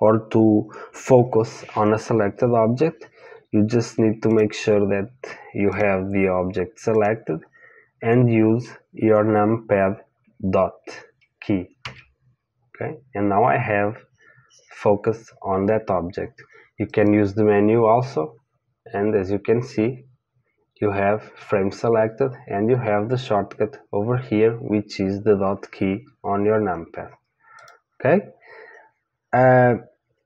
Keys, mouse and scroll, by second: 4.3-11.8 drag, 11.8 KP_Decimal, 16.9-27.4 drag, 27.6 click, 29.6-30.2 middle drag.